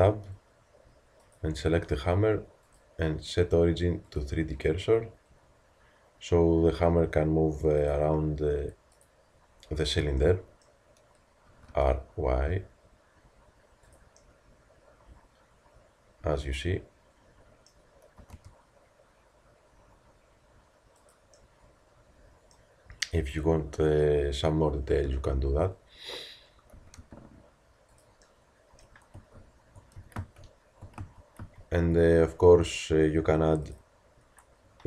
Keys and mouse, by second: 8.0-11.4 drag, 11.4 r, 18.2 r, 22.5-25.1 middle drag, 25.1 t, 26.7 r, 30.2 ctrl+z, 31.0 ctrl+z, 33.0 a.